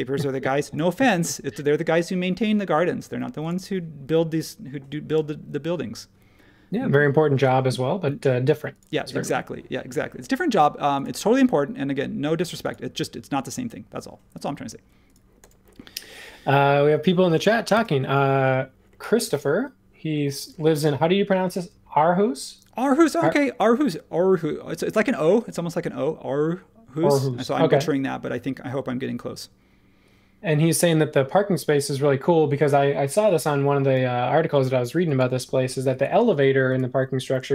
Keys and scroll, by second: 3.0 space, 17.7 super+s.